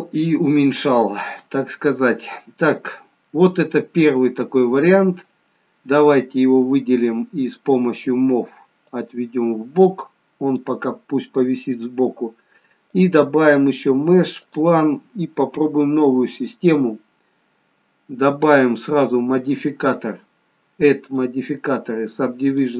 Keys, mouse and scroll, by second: 1.6-3.5 scroll down 3, 2.2 middle click, 4.8-5.2 scroll down 2, 9.1 click, 13.0 click, 14.6 click, 15.4-16.0 scroll up 5, 17.0-17.6 scroll up 1, 17.6-19.9 scroll up 1, 19.9 click, 21.0 click.